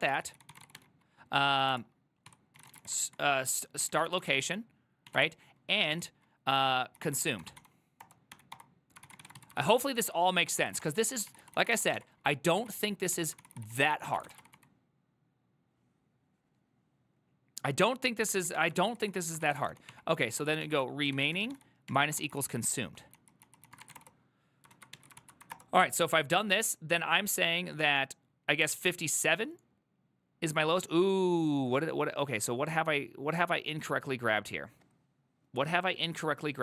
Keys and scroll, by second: 0.0-15.1 typing, 10.1 ctrl+c, 13.5 ctrl+c, 13.9 ctrl+c, 18.6-26.0 typing, 24.8 ctrl+a.